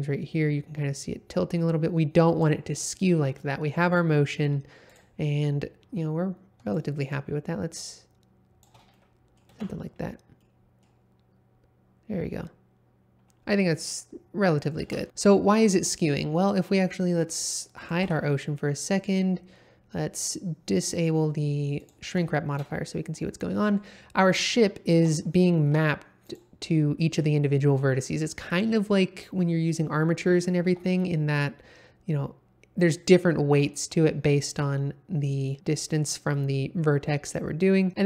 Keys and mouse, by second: 3.8 middle click, 6.7-8.6 shift+drag, 8.9-9.4 middle drag, 9.5 space, 10.4 middle click, 13.7-14.6 middle drag, 14.8 space, 17.8 click, 18.0 h, 21.8 click, 22.2 shift+middle drag, 22.7-23.1 middle drag, 23.5 middle click, 24.9 Tab, 25.6 1, 30.6 g.